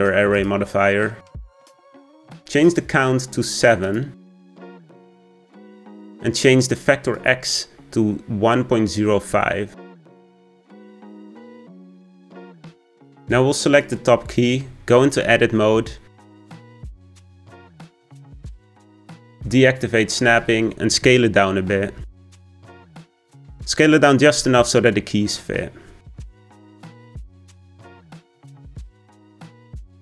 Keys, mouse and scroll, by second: 1.4-5.3 drag, 5.8-12.2 drag, 14.7 click, 16.1 click, 17.6 Tab, 21.2 shift+Tab, 24.4 s.